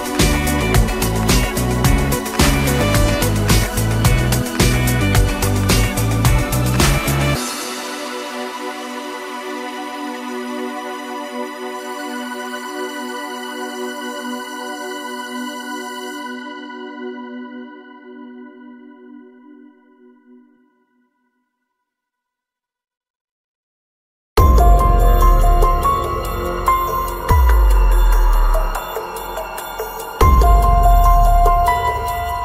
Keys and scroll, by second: 3.0 Escape, 7.0 Escape, 25.6 Return, 30.1 Return.